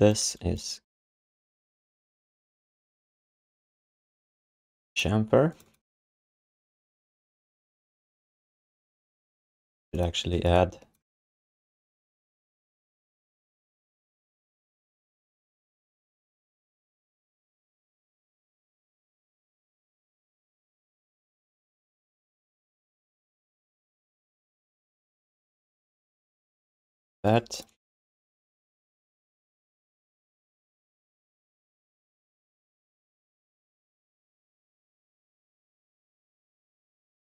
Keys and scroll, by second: 23.9 BackSpace, 24.8 BackSpace, 26.2 q, 27.0 alt+shift+d.